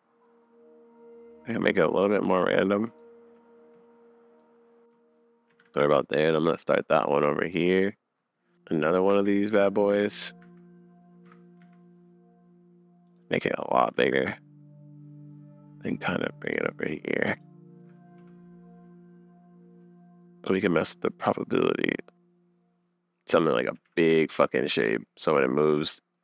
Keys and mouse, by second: 5.5 r, 7.5 click, 8.5 click, 9.0 super+BackSpace, 9.1 super+s, 10.0 shift+d, 11.6 s, 13.9 r, 17.3 click, 18.2 n, 23.3 middle click, 23.7 r, 26.1 click.